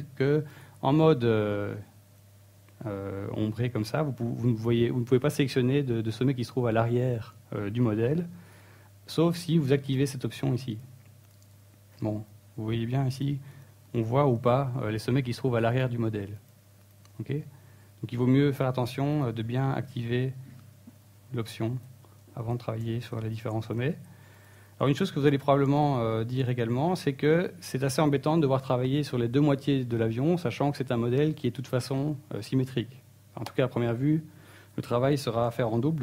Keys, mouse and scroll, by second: 0.1 z, 1.0 ctrl+z, 1.5 ctrl+z, 1.8 ctrl+z, 2.2 ctrl+z, 2.5 ctrl+z, 3.0 ctrl+z, 3.7 ctrl+z, 4.3 ctrl+z, 5.9 z, 6.9 middle click, 9.0 shift+middle click, 13.5 KP_1, 13.8 KP_3, 15.1 click, 16.5 click, 17.5 middle click, 18.3 click, 18.7 click, 19.2 click, 19.6 click, 21.0 click, 21.7 click, 22.1 click, 22.7 KP_3, 24.5 click, 26.3 middle click, 27.8-31.1 typing, 29.7 click, 31.9 click, 32.1 middle click, 32.5-32.8 scroll down 2, 32.8 middle click, 33.7 Tab.